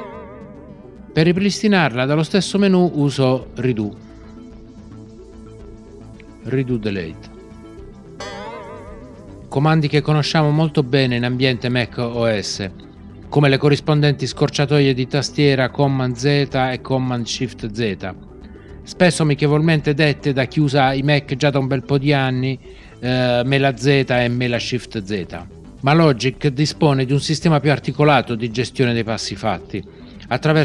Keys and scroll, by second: 8.2 shift+super+z.